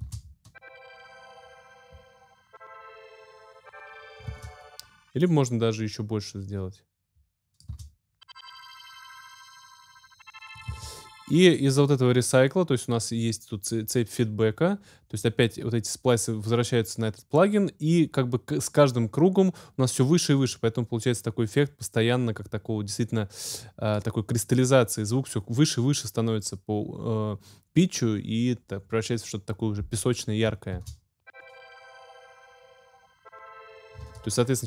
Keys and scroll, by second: 0.0 space, 4.3 space, 7.7 space, 10.6 space, 30.7 space, 34.0 space.